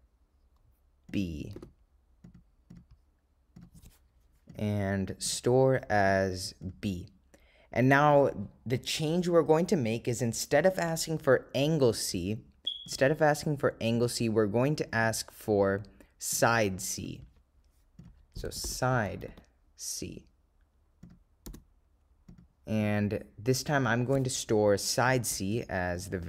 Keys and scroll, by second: 1.2 0, 2.7 ., 3.1 0, 5.3 ,, 8.2 Return, 14.1 Right, 15.1 Return, 21.1 0, 22.4 ., 23.0 0, 26.1 ,.